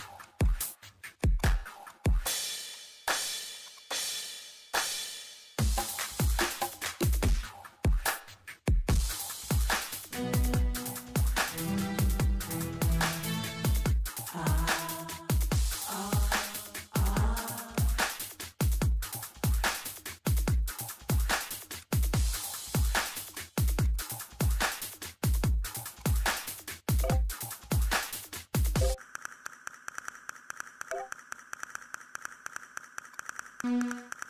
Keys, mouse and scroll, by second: 4.1 scroll down 1, 5.8 click, 8.8 scroll down 1, 9.0 click, 9.6 scroll down 1, 9.9 click, 10.0 scroll up 1, 10.2 click, 11.4 scroll, 11.5 click, 11.9 scroll, 12.2 scroll down 1, 12.3 click, 13.7 click, 13.8 scroll up 1, 14.0 middle click, 14.9 middle click, 15.0 scroll down 1, 15.1 scroll up 1, 15.2 middle click, 15.8 scroll down 1, 15.9 scroll up 1, 16.0 ctrl+middle click, 16.4-16.9 scroll down 2, 16.7 middle click, 17.7 click, 18.6 scroll up 1, 20.1 click, 20.4 middle click, 21.6 scroll down 1, 21.8 click, 23.3 click, 24.6 scroll down 1, 24.8 scroll up 1, 25.3 click, 26.2 scroll up 1, 26.3 middle click, 27.6 click, 28.8 middle click, 29.0 scroll up 1, 29.4 click, 29.7 scroll up 1, 31.3 middle click, 31.8 scroll up 1, 32.0 ctrl+middle click, 33.1 click.